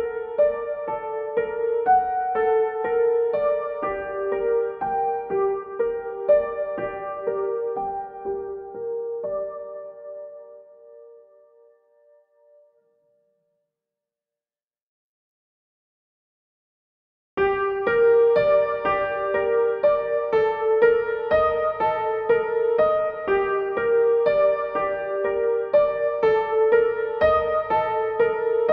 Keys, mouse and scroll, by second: 1.3-23.3 drag, 23.5-28.7 drag.